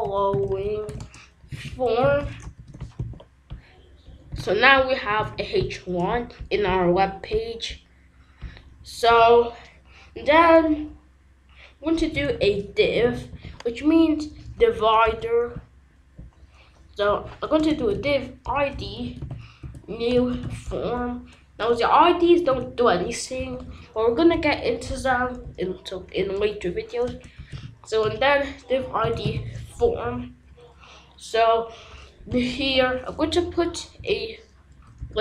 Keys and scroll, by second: 0.0-3.0 typing, 9.0 Return, 11.8-13.9 typing, 14.7 Down, 15.0 Return, 17.0 Up, 17.5-20.9 typing, 18.4 Return, 22.5 d, 23.3 i, 23.6 v, 25.1 Down, 25.4 Return, 27.0-29.8 typing, 28.0 Return, 32.0-33.3 typing, 34.7 Down, 34.9 Return.